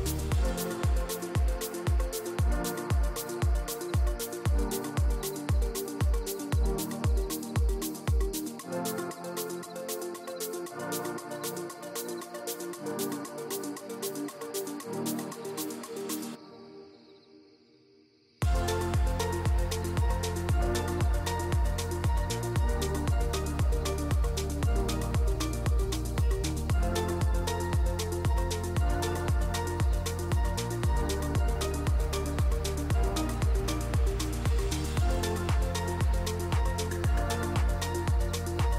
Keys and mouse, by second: 0.0 drag, 2.0 click, 3.5 click, 6.0 click, 12.0-13.2 drag, 14.3-15.3 drag, 16.1 KP_Decimal, 16.1-16.6 middle drag, 19.4-22.1 drag, 22.9-24.5 drag, 24.5-24.9 middle drag, 25.4 middle click, 28.8-29.3 middle drag, 29.6-29.9 middle drag, 29.9-30.4 drag, 31.9 click, 32.7 drag, 33.2 click, 34.2-35.1 drag, 35.5 click, 36.3 click, 37.9-38.2 middle drag.